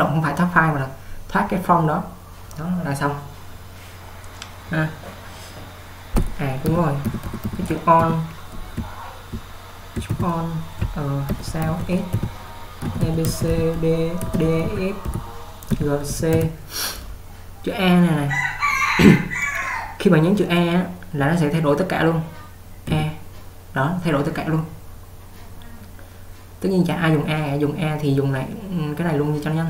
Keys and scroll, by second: 6.8-8.0 typing, 10.2 :, 19.1 typing, 23.0 a.